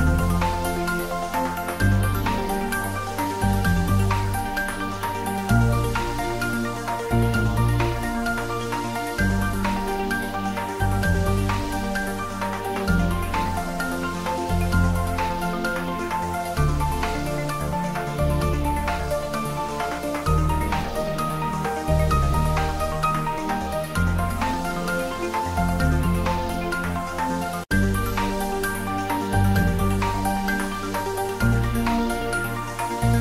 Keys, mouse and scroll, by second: 0.2 click, 0.8 ctrl+middle click, 1.3 ctrl+s, 1.8 ctrl+middle click, 2.1 middle click, 2.8 click, 3.0 ctrl+middle click, 3.4 ctrl+z, 3.8-4.9 typing, 5.9 click, 6.4 ctrl+s, 6.6-8.6 middle drag, 8.6-10.0 ctrl+middle drag, 10.0 click, 10.6 ctrl+z, 11.3 click, 11.7 ctrl+middle click, 11.9-13.0 typing, 14.1 click, 14.5 r, 15.2 click, 15.5 ctrl+z, 16.2 middle click, 16.9 ctrl+z, 17.4 middle click, 17.9-18.8 typing, 19.4 click, 19.7 ctrl+s, 20.0 middle click, 20.6 ctrl+middle click, 20.9 shift+middle click, 21.6 Tab, 22.7 click, 24.0 Tab, 24.2 click, 25.9 3, 26.1 click, 26.8 ctrl+click, 29.8 middle click, 30.7 shift+click, 31.4 shift+middle click, 32.0 g.